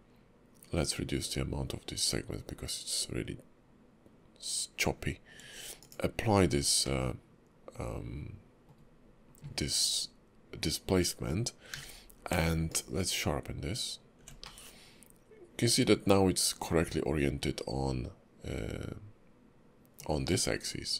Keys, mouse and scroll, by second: 6.8 middle click, 11.7 q, 14.4 middle click, 20.6 scroll down 3.